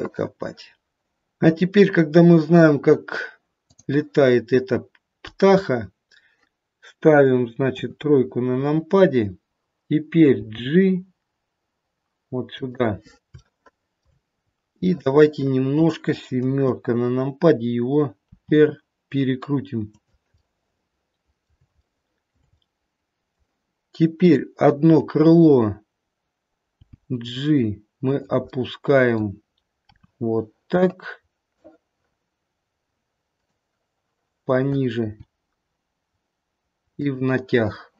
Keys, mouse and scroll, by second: 3.7 click, 7.7 KP_3, 10.5 g, 13.4 shift+middle click, 14.0 shift+middle click, 14.5 scroll down 1, 14.8 middle click, 16.4 KP_7, 18.3 r, 20.3 middle click, 21.1 middle click, 21.9 shift+middle click, 22.4 shift+middle click, 22.6 middle click, 24.2 click, 26.7 g, 28.4 middle click, 28.9 middle click, 29.8 r, 34.9 g.